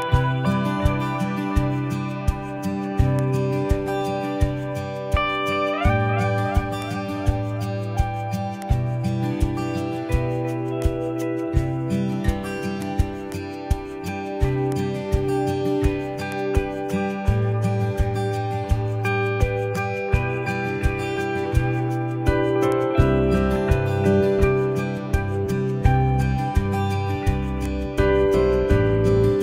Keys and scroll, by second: 17.8 super+t.